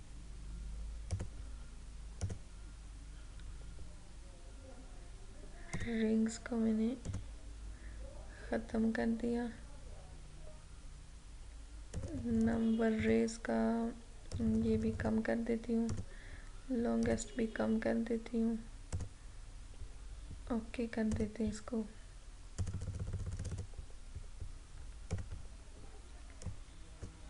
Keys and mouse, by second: 5.8 click, 12.0-27.2 drag.